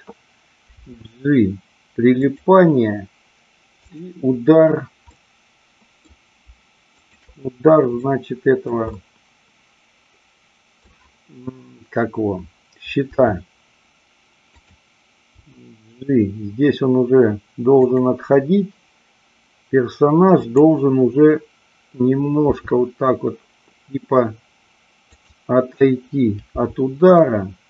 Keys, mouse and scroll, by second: 0.6 g, 2.2 click, 3.8 click, 5.1-6.0 middle drag, 7.0-8.4 shift+drag, 8.5 middle click, 9.0-10.8 middle drag, 13.1 r, 14.6 click, 15.4 g, 17.9 click, 20.4-21.8 drag, 22.5 r, 25.2 click, 26.5 g.